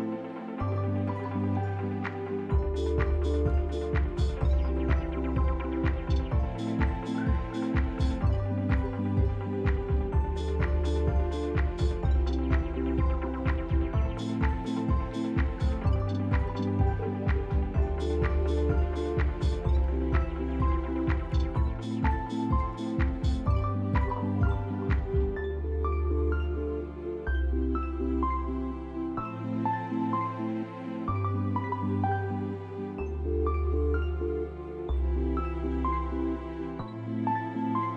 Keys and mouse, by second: 1.7 click, 2.6 g, 5.8 Tab, 6.6 shift+middle click, 7.3 click, 8.6 r, 12.0 g, 16.1 click, 16.7 r, 20.4 ctrl+middle click, 22.5 ctrl+click.